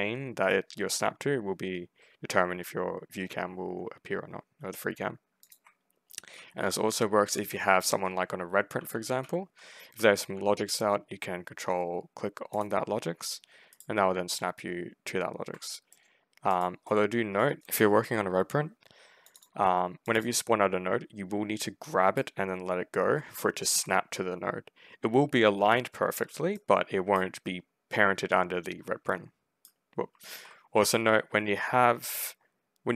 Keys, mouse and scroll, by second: 1.4 ctrl+scroll down 2, 1.6-2.2 ctrl+scroll up 4, 2.6-3.0 ctrl+scroll down 2, 3.4 ctrl+scroll down 2, 3.6 ctrl+scroll up 2, 4.2 ctrl+scroll up 2, 4.5 ctrl+scroll down 2, 5.3 ctrl+click, 5.7-7.4 typing, 8.6 w, 9.1 s, 9.8 w, 12.4 ctrl+click, 13.6 ctrl+right click, 14.8 ctrl+middle click, 15.8 middle click, 16.4 click, 16.7 middle click, 17.2 click, 17.8 right click, 19.1 click, 19.3 click, 19.9 click, 20.1 click, 21.7 right click, 26.4 right click, 28.9 right click, 30.1 ctrl+z.